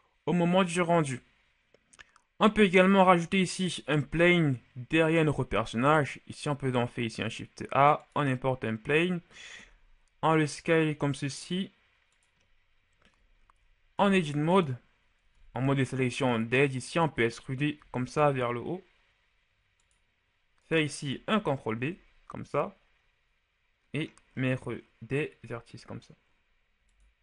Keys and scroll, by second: 3.8 shift+a, 9.5 s, 13.8 ctrl+Tab, 15.2 ctrl+Tab, 17.6 e, 21.6 ctrl+b.